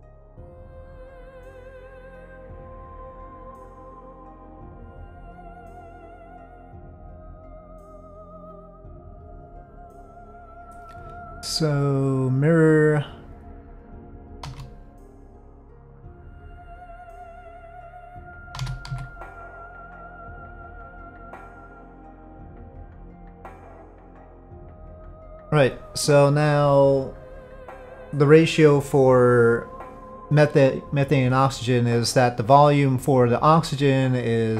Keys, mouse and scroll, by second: 4.0-5.7 middle drag, 7.0 click, 8.3 click, 9.7-12.5 drag, 14.4 shift+d, 15.3-17.6 drag, 18.6 s, 22.7-24.8 drag.